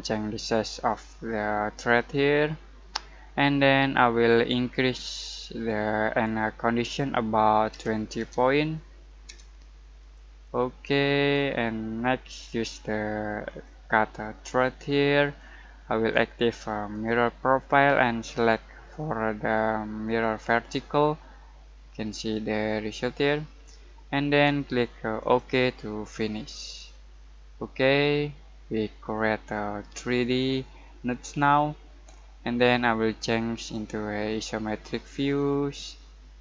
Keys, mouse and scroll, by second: 4.6 click, 4.7-7.7 drag, 7.7-9.9 typing, 10.0 click, 11.4-16.9 drag, 15.8 typing, 19.9 typing, 20.0 click, 21.1-25.2 middle drag, 24.2 typing, 25.2 click, 26.8-30.7 middle drag, 31.1-33.5 middle drag, 33.5 click, 33.5 typing.